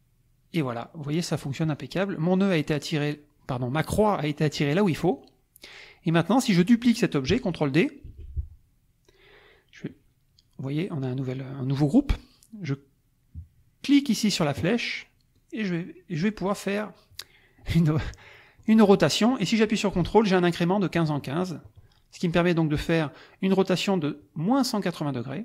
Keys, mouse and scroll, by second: 1.7 click, 4.6 click, 5.1 click, 8.1 ctrl+d, 15.3-25.4 drag.